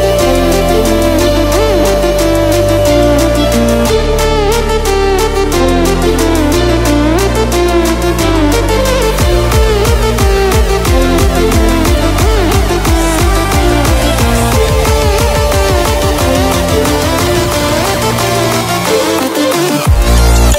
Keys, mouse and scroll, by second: 6.6 click, 9.9 Delete, 11.4-11.9 ctrl+alt+scroll down 2, 13.0-13.3 ctrl+alt+scroll down 2, 13.7-17.8 drag, 15.3 click, 17.9-18.7 ctrl+alt+scroll up 2, 18.7-20.5 drag.